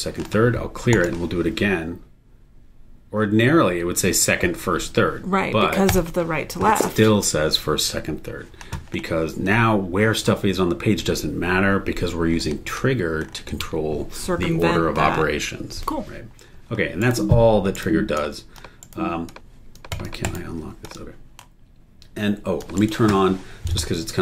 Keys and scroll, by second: 17.0 super+e, 20.2 super+e, 22.8 super+e.